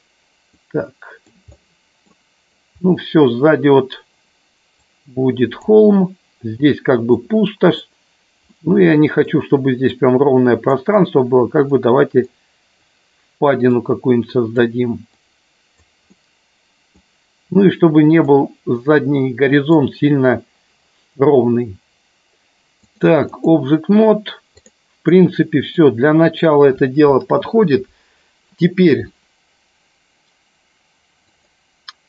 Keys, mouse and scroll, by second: 0.6 click, 1.6 middle click, 2.8 middle click, 4.7 click, 7.0 middle click, 8.6 middle click, 9.9 click, 10.9 middle click, 12.2 click, 13.7 click, 15.2 click, 16.2 middle click, 18.2-19.8 drag, 22.9 click, 24.9-25.7 middle drag, 31.3 click.